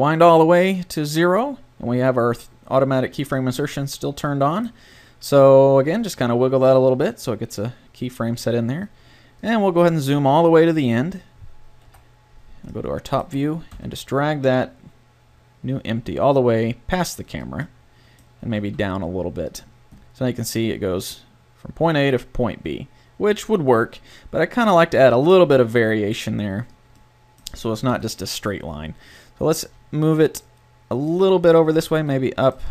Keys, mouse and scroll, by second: 3.4-5.9 middle drag, 5.9 g, 11.8 KP_7, 13.7 g, 18.4 g, 19.6-21.0 drag, 27.9 KP_7, 29.6 g, 31.8 g, 32.6 middle click.